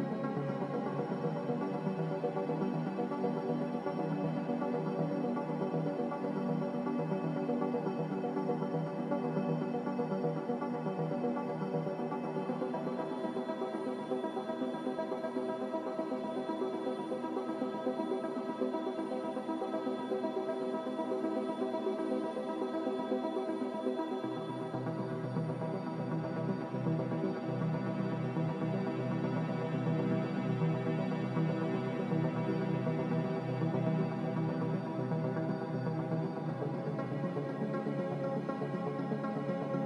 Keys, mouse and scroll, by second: 9.8 g, 14.4 z, 15.7 Delete, 16.3-19.4 typing, 24.1 g, 27.2 n, 34.0 b.